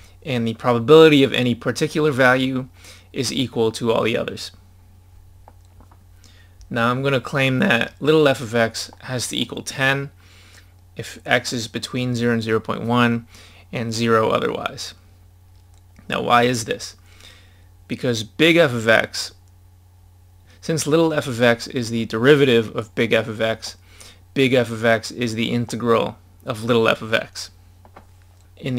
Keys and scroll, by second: 6.8 scroll down 1.